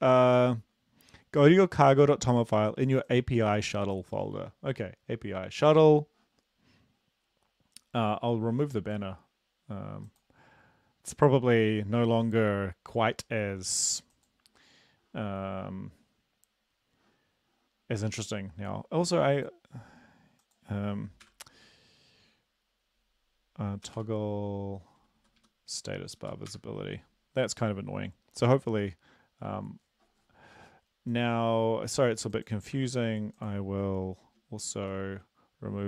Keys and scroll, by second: 21.2 ctrl+p, 23.9 typing, 25.2 Right, 25.4 Right, 25.8 Down, 26.2 Up, 26.5 typing, 32.8 ctrl+b, 34.7 ctrl+b.